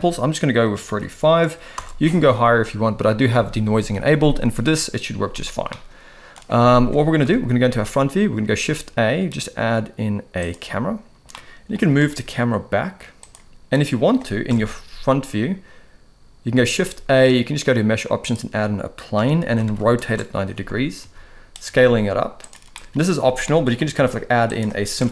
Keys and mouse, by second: 5.7 middle click, 7.2 KP_1, 8.4 shift+a, 11.3-11.8 middle drag, 11.8 g, 14.5 KP_0, 16.6 shift+a, 19.1 r, 21.0 s, 21.6 s, 22.7 middle click, 23.4 middle drag, 23.8 g, 25.0 KP_0.